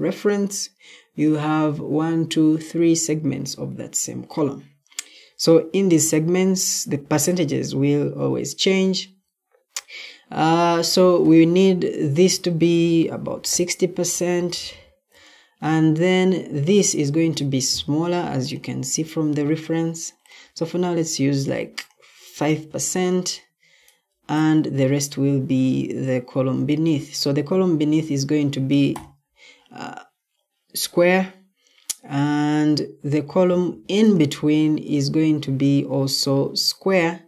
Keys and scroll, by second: 13.1-13.9 typing, 22.4 5.